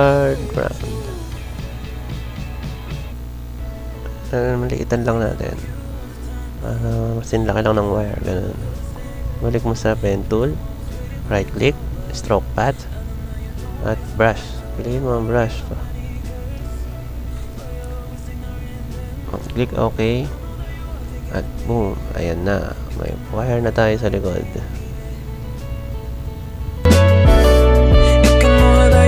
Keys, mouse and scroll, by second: 10.8 right click, 12.5 click, 20.7 Delete, 21.3 Delete, 22.2 click, 23.4 click, 23.9-26.7 drag, 27.0 click, 27.6 click, 28.0 click.